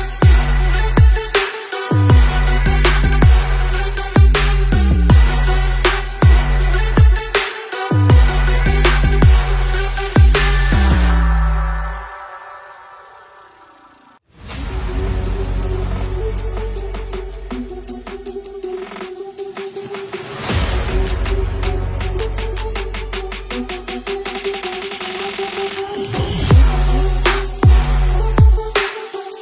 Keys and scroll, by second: 1.5 space, 1.7 space, 7.4-8.5 typing, 11.8-14.0 typing, 15.0 x, 16.0 x, 16.8 space, 16.9 v, 20.0 ctrl+shift+g, 20.3 z, 20.4 space, 20.5 v, 21.1 Return, 29.1 b.